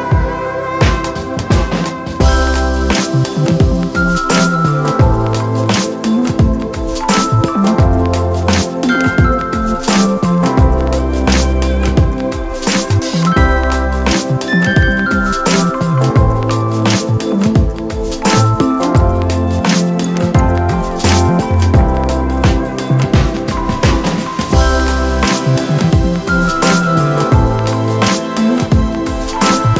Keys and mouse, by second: 5.2 shift+click, 9.2 shift+click, 11.7 shift+click, 14.6 shift+click, 16.7 shift+click, 18.1 shift+click, 18.7 shift+click, 19.1-23.6 shift+drag, 23.6 click, 24.4 click, 26.2-29.7 drag.